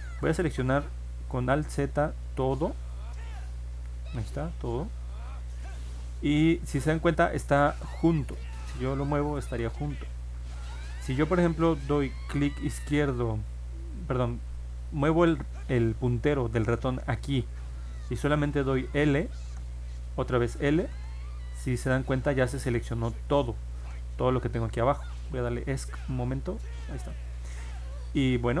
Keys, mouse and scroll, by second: 1.6 alt+z, 2.5 click, 3.2 click, 7.6 click, 9.4 click, 15.4 middle click, 19.4 l, 25.6 Escape, 27.0 middle click, 27.6 middle click.